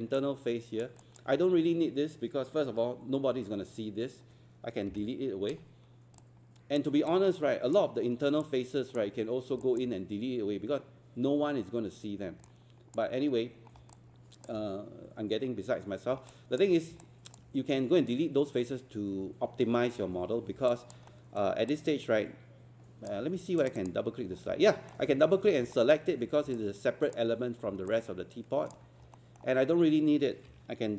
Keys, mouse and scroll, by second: 0.1 alt+click, 1.0 alt+click, 4.9 Delete, 5.6 scroll down 1, 6.2 alt+click, 7.1 alt+click, 8.5 alt+click, 9.3 scroll up 1, 9.6 alt+click, 13.7 scroll down 1, 13.9 alt+click, 15.5 scroll up 1, 16.3 alt+click, 17.0-18.0 alt+drag, 19.9 scroll down 1, 20.7 alt+click, 21.1 alt+middle click, 21.7-23.1 alt+drag, 23.6 click, 24.3 scroll down 1, 24.7 alt+middle click, 25.7 alt+middle click, 26.6 alt+click, 27.9 alt+click, 29.2 alt+middle click.